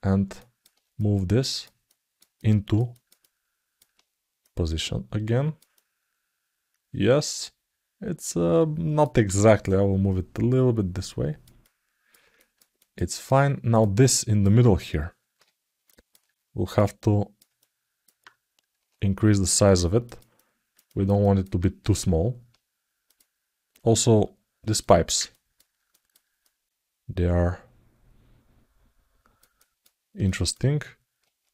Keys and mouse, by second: 0.2 alt+middle click, 0.8 click, 1.6 ctrl+alt+middle click, 2.1 alt+middle click, 2.7 alt+shift+middle click, 2.9 alt+middle click, 4.2-5.3 drag, 5.5-8.8 alt+middle drag, 9.4-11.2 drag, 11.4 alt+middle click, 12.1 alt+shift+middle click, 12.5 alt+middle click, 12.9 alt+shift+middle click, 13.8 alt+middle click, 15.6 alt+middle click, 16.5 click, 17.3 alt+middle click, 20.1 alt+middle click, 21.0 alt+shift+middle click, 24.5 alt+middle click, 25.2 ctrl+alt+middle click, 25.7 alt+shift+middle click, 26.2 alt+middle click, 27.1-29.1 alt+middle drag, 29.3 ctrl+alt+middle click, 30.0 alt+shift+middle click.